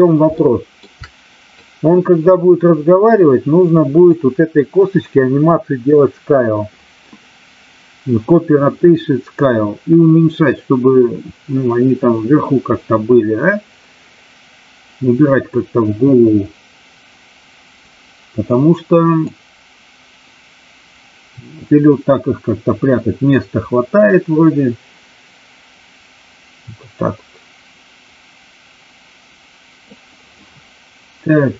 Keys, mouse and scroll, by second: 0.3 shift+middle click, 1.6-4.1 drag, 19.2-29.8 drag.